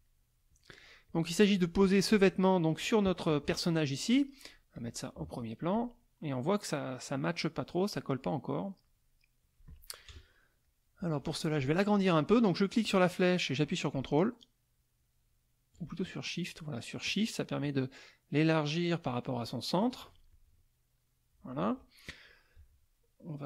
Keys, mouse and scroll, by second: 0.1 middle click, 1.1 click, 2.1-3.5 drag, 4.7 click, 5.7-9.8 drag, 10.1 KP_Add, 10.6 middle click, 12.7-20.0 drag, 20.3-21.5 ctrl+shift+drag.